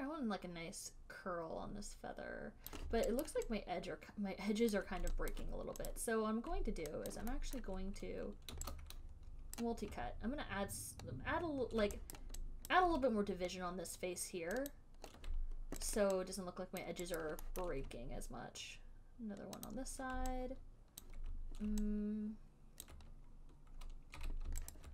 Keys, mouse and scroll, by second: 3.0 click, 3.5 alt+right click, 5.0 alt+click, 5.6 click, 6.2 click, 7.4 alt+click, 7.9 alt+middle click, 10.0 right click, 12.5 alt+right click, 13.0 alt+right click, 14.2 alt+right click, 15.1 ctrl+right click, 15.1 alt+click, 16.3 alt+right click, 17.1 alt+click, 17.5 alt+right click, 17.9 alt+middle click, 20.0 ctrl+click, 21.4 alt+click, 23.2 alt+click, 23.2 ctrl+click, 24.5 q.